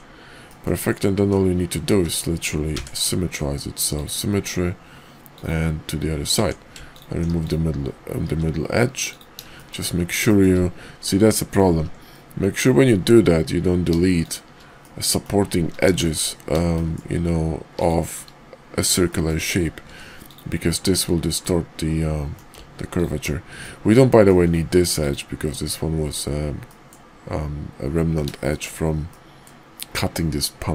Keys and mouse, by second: 0.5 middle click, 1.8 alt+x, 6.3 Tab, 7.3 x, 8.2 x, 9.5 shift+middle click, 10.3 shift+middle click, 11.7 ctrl+z, 14.2 shift+click, 14.8 middle click, 15.9 shift+click, 16.7 shift+click, 17.6 shift+click, 19.1 shift+middle click, 19.1 shift+click, 19.8 x, 21.4-22.4 middle drag, 22.8 alt+click, 23.6 middle click, 24.3 x, 25.5 middle click, 26.6 middle click, 28.5 shift+middle click, 29.1 middle click.